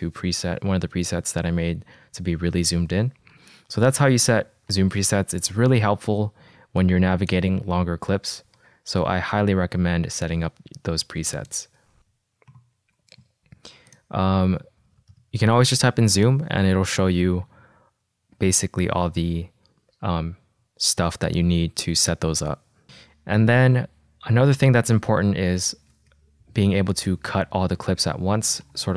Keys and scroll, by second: 5.2 -, 9.1 =, 13.0 k, 15.1-16.0 typing, 26.7 Escape.